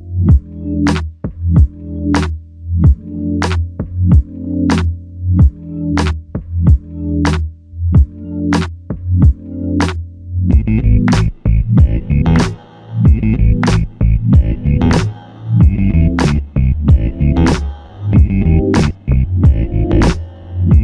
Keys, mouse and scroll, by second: 4.8 double click, 9.3 double click, 9.5 shift+click, 10.9 shift+click, 14.2 typing, 15.6 double click, 20.2 shift+click.